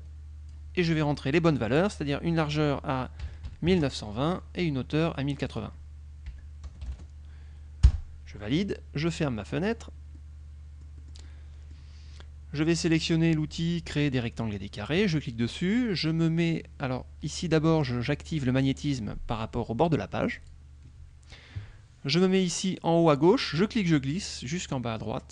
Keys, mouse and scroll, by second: 1.5 click, 3.3 KP_1, 3.5 KP_9, 3.8 KP_2, 5.4 click, 6.4 KP_1, 6.7 KP_0, 6.9 KP_8, 7.3 KP_0, 7.9 Return, 9.7 click, 10.3-12.0 middle drag, 14.9 click, 20.4 click, 23.6-25.3 drag.